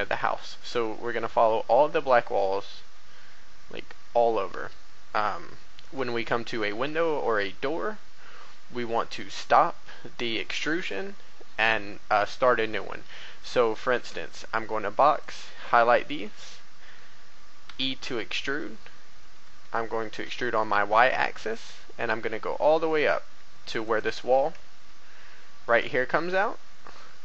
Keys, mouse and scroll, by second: 5.3-5.6 scroll up 1, 6.2 shift+middle click, 7.9-8.3 scroll up 1, 8.9 shift+middle click, 12.8 shift+middle click, 13.0 a, 13.5 a, 13.9 b, 14.2-15.9 drag, 17.6 e, 19.1 x, 19.4 z, 20.2 y, 23.8 click, 24.6-25.2 shift+scroll, 25.2 scroll up 1, 26.4 shift+middle click.